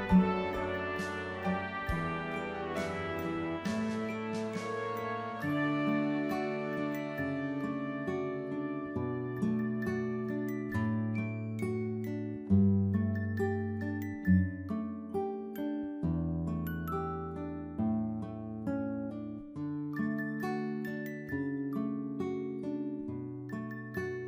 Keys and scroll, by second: 16.5 ctrl+=.